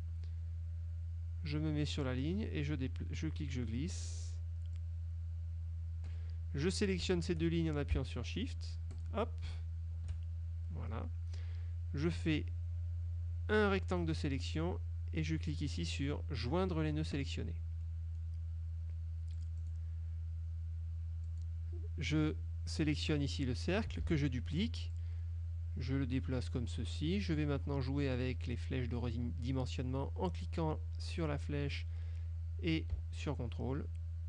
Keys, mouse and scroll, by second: 2.2-4.0 drag, 4.9-6.4 drag, 9.0 shift+click, 12.4-14.4 drag, 17.2 click, 18.0 middle click, 19.5 click, 21.4 click, 24.2 ctrl+d, 25.0-26.8 drag, 31.3-34.2 drag.